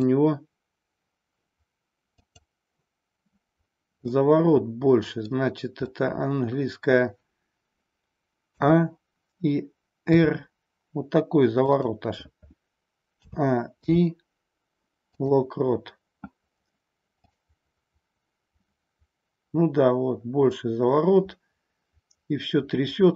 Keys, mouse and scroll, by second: 2.1 click, 4.0-5.3 middle drag, 5.9-6.9 middle drag, 8.5 a, 10.1 r, 11.6 click, 13.1 a, 13.6 i, 17.3-23.1 drag.